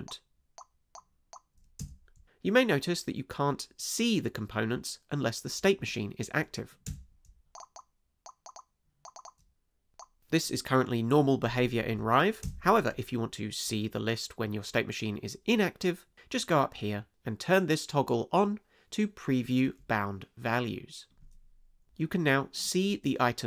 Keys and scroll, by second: 1.8 space, 6.9 space, 12.4 space.